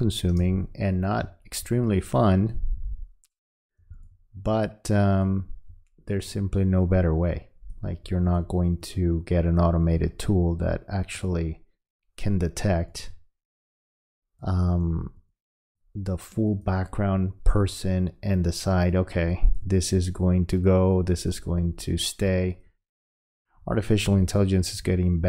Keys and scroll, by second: 1.5 space.